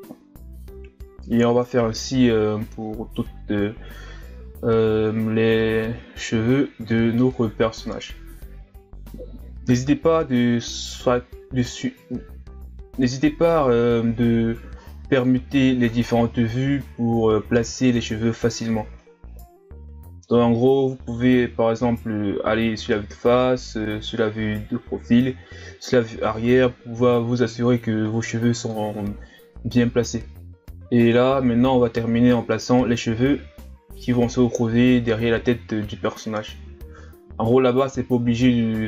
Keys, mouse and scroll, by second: 0.0-0.5 scroll up 1, 0.5 right click, 0.6 scroll down 1, 0.7 Tab, 0.9 scroll up 1, 1.1 right click, 1.3 scroll down 1, 1.5 shift+d, 2.6-3.0 scroll down 1, 3.0 shift+d, 3.5 s, 3.8 middle click, 4.1 ctrl+KP_3, 4.4-6.1 drag, 6.1 scroll down 3, 6.2 shift+d, 7.3 Tab, 7.5 a, 7.6 scroll down 1, 7.7 scroll up 1, 7.9 right click, 8.1 scroll down 2, 8.2 Tab, 8.5 right click, 8.8 ctrl+KP_3, 9.4 right click, 9.7 g, 10.7 KP_1, 10.9-11.7 scroll down 1, 11.7 ctrl+KP_3, 11.9 scroll up 1, 12.4 ctrl+z, 12.6 right click, 12.9 g, 13.2 right click, 13.6 g, 14.4 right click, 14.6 ctrl+z, 14.7 right click, 14.8 ctrl+z, 15.0 KP_1, 15.2 scroll down 1, 15.4 right click, 15.8 g, 16.4 ctrl+z, 16.5 right click, 16.7 ctrl+z, 16.8 right click, 16.9 ctrl+z, 17.1 right click, 17.3 ctrl+z, 17.6 right click, 17.7 ctrl+z, 18.0 right click, 18.5 ctrl+z, 18.6 scroll down 1, 18.7 middle click, 19.0 right click, 19.6 KP_3, 20.3 g, 20.6 s, 21.7 click, 21.9 s, 22.7 click, 23.1 middle click, 23.4 Tab, 23.5 a, 23.6 scroll down 2, 23.8 KP_1, 24.2 scroll up 4, 25.2-26.0 scroll up 1, 26.1 KP_7, 26.3 scroll up 4, 26.4 Tab, 26.6 right click, 26.9 shift+d, 27.4 s, 28.0 ctrl+KP_3, 28.6 s, 29.8 shift+d, 30.9 middle click, 31.3 KP_1, 31.6 ctrl+KP_3, 32.0 scroll down 2, 32.1 s, 32.8 click, 33.3 KP_3, 33.7 click, 34.6 s, 35.4 click, 36.2 KP_1, 37.2 middle click, 38.0 scroll up 1, 38.2 right click, 38.3 middle click, 38.5 click, 38.7 ctrl+z, 38.8 middle click.